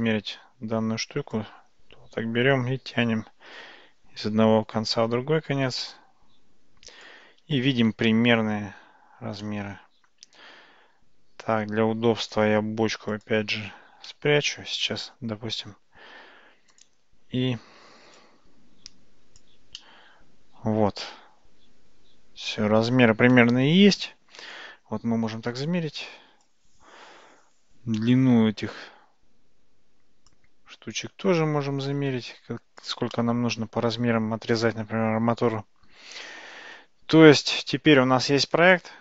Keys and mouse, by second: 1.7-7.1 drag, 8.1 shift+middle click, 9.5 middle click, 12.3 drag, 14.7 h, 18.3-19.5 drag, 19.8-24.9 middle drag, 26.5-28.7 drag, 30.4-32.9 drag, 33.2-36.7 middle drag, 38.0 click.